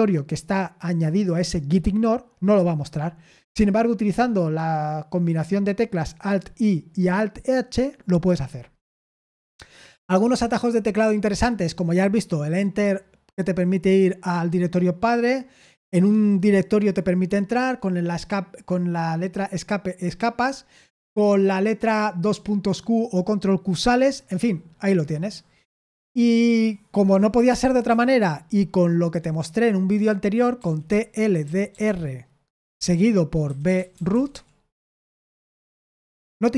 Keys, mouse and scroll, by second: 10.6-13.1 scroll down 1, 24.9-27.1 scroll down 1, 27.1-27.8 scroll down 1, 27.8-29.1 BackSpace, 30.3-31.8 typing, 33.2-34.8 typing, 35.2 Return.